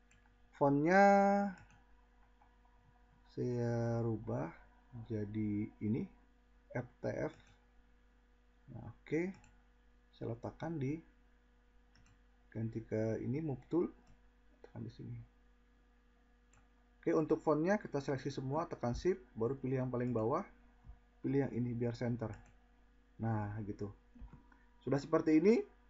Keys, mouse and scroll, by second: 14.2-17.0 drag.